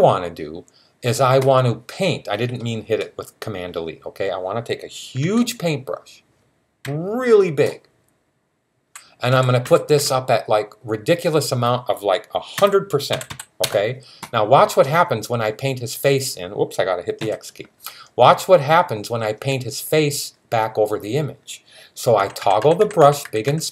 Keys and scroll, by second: 5.0 typing, 6.6-9.8 typing, 12.2-13.1 typing, 17.0 x, 22.0-23.3 typing.